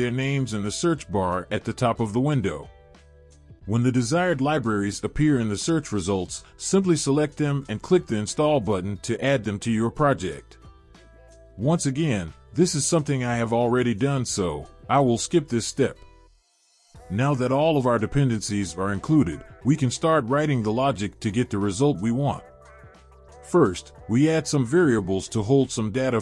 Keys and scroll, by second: 1.9 typing, 4.0-4.9 typing, 6.0 typing, 15.5 BackSpace, 19.4 ctrl+v.